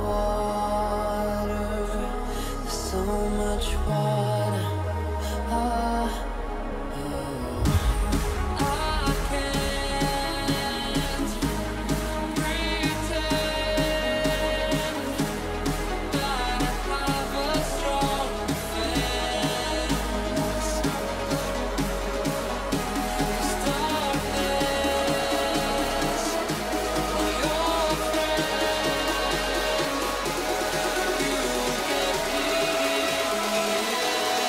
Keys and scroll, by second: 3.4 [, 6.0 h, 14.1 ctrl+alt+shift+e, 22.2 ctrl+shift+a, 24.5 h.